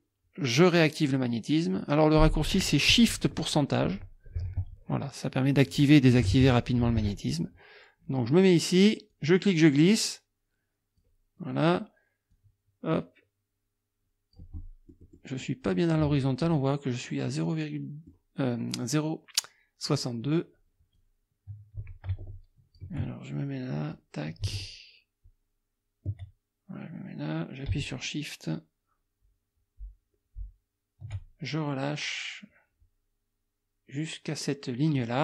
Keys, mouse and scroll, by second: 9.1-11.2 drag, 12.3-14.5 drag, 14.6 click, 15.4 click, 17.3-18.3 drag, 21.0-23.0 drag, 24.0-35.2 drag.